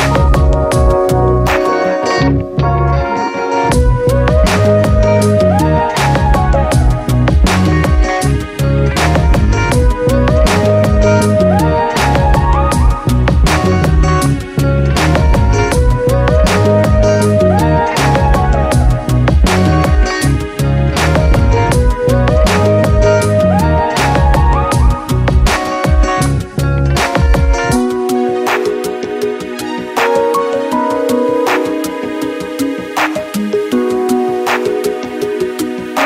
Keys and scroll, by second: 21.5 Return.